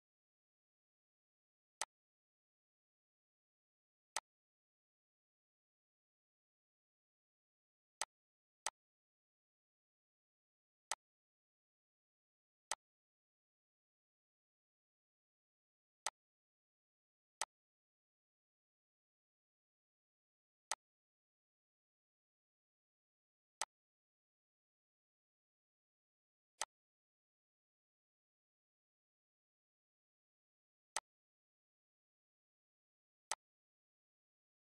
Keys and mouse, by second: 1.8 click, 5.7 click, 9.1 click, 9.7 click, 11.8 click, 16.7 click, 18.7 click, 19.4 click, 23.4 click, 26.2 click, 27.0 click, 29.4 click, 31.9 click.